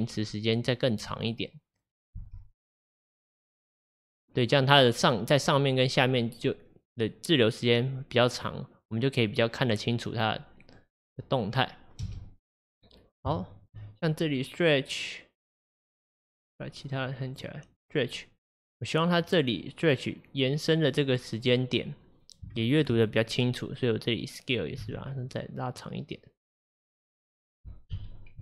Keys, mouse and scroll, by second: 2.3 space, 12.1 space, 13.4-16.5 shift+middle drag, 16.5 click, 17.1-17.9 drag, 19.3-22.3 drag, 22.6 shift+middle click, 23.0-23.5 scroll up 4, 23.1-23.5 drag, 24.9 s, 28.0 KP_1.